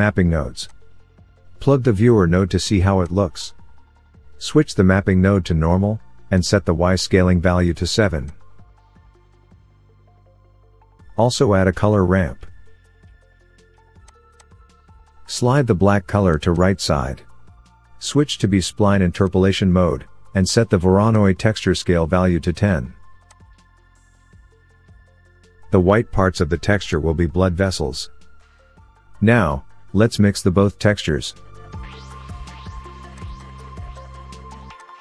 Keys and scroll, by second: 12.7 shift+a, 32.2 Delete.